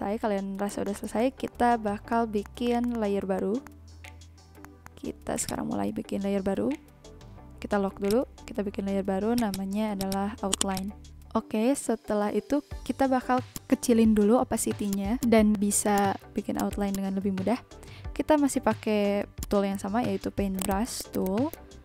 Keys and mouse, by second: 0.8 click, 1.1 click, 1.4 click, 2.1 click, 2.4 click, 2.6 click, 2.7 b, 2.8 click, 3.2 click, 3.6 click, 4.6 click, 4.8 click, 13.7 click, 14.8 click, 16.9 click, 19.4 click, 20.2 ctrl+z, 20.5 click, 21.4 ctrl+z, 21.5 click.